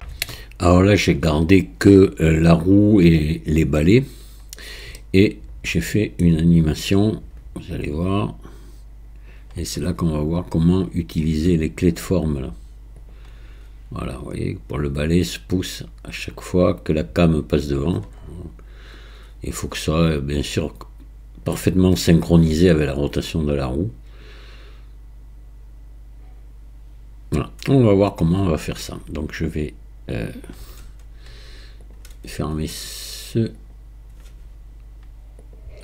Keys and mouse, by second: 5.0-6.2 middle drag, 7.1-9.4 drag, 13.1 drag, 31.9 click.